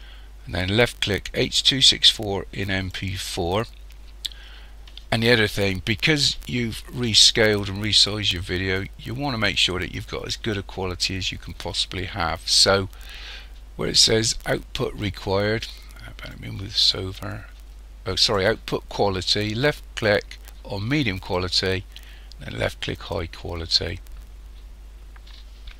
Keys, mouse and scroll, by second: 16.3 click, 21.2 click.